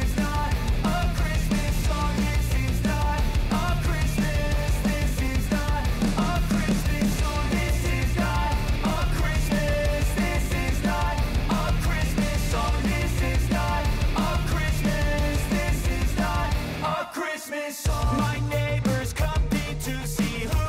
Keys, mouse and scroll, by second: 0.1-2.3 drag, 6.0-9.0 drag, 11.4 space, 13.0 scroll up 1, 14.5-20.6 drag.